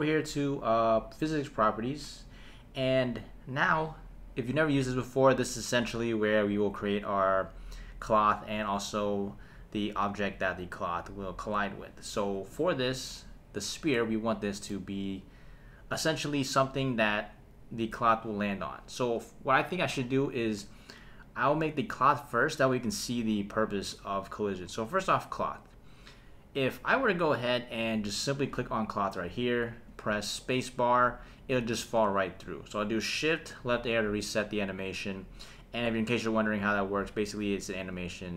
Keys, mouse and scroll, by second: 1.0 click, 13.9 scroll down 1, 13.9-14.7 middle drag, 15.1-16.7 scroll up 2, 16.7-17.4 scroll down 2, 21.8 click, 28.7 click, 29.9 space, 31.8 space, 33.6 shift+Left, 35.9 click, 37.9 space.